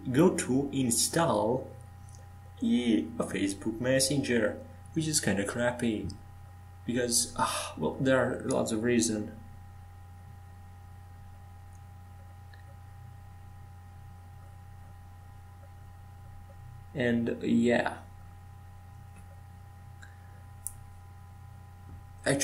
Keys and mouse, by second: 4.7 Tab, 6.2 Tab, 11.1-12.2 middle drag, 13.2 shift+d.